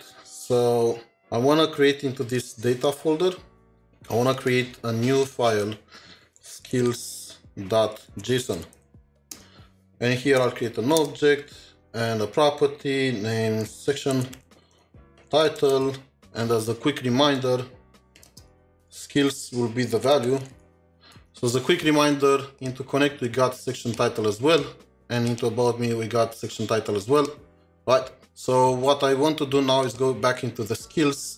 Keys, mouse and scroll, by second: 0.5 ctrl+shift+7, 0.5 scroll down 1, 2.2 scroll down 3, 4.4 scroll down 1, 4.5 right click, 6.4-8.9 typing, 9.3 Return, 10.4 shift+[, 11.0 Return, 11.8-12.7 scroll up 1, 12.7-13.9 scroll up 1, 13.9-15.8 typing, 18.2-19.2 typing, 20.2-20.9 typing.